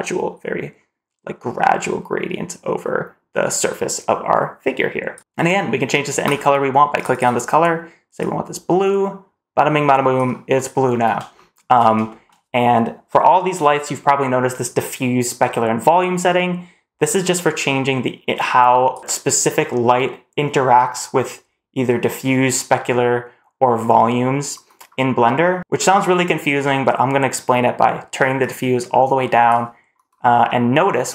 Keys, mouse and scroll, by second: 5.1-6.1 scroll down 1, 6.1 click, 7.0 click, 11.2 shift+middle drag, 11.5 shift+scroll down 1, 11.9 shift+middle click, 17.0-18.8 drag, 24.7-25.2 scroll down 2, 25.2-25.5 scroll up 1, 28.2-29.3 drag, 30.3 middle click.